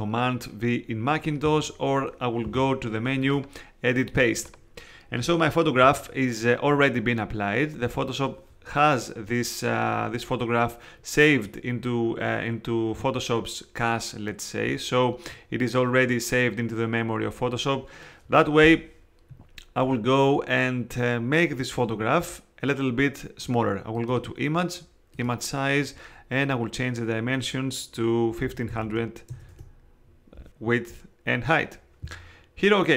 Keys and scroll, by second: 28.2-29.3 typing, 29.5 Tab.